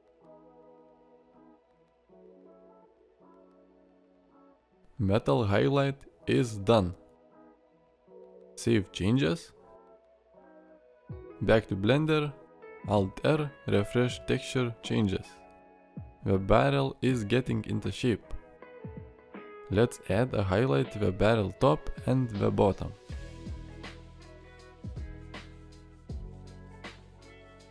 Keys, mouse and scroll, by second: 15.7-17.3 middle drag, 18.3-18.7 middle drag, 19.2 middle click, 25.2 click, 26.2 click, 27.0 ctrl+click.